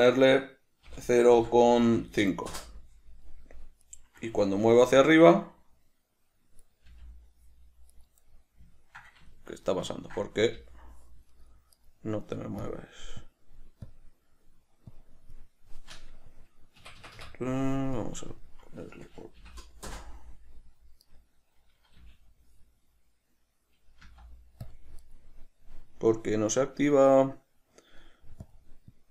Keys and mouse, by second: 4.1 right click, 5.1 g, 7.0 right click, 7.1 g, 8.3 right click, 8.6-11.6 middle drag, 10.8 g, 12.0 right click, 12.9-21.3 drag, 17.1 Escape, 20.2 Return, 21.3 right click, 22.3 g, 25.0 click, 25.3 right click, 28.7-29.1 drag.